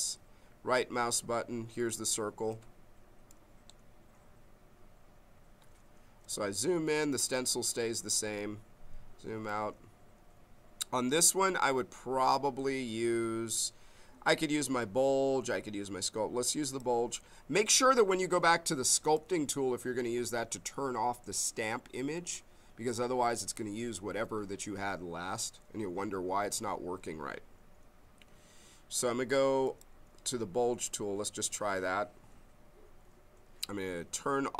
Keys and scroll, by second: 8.2 s.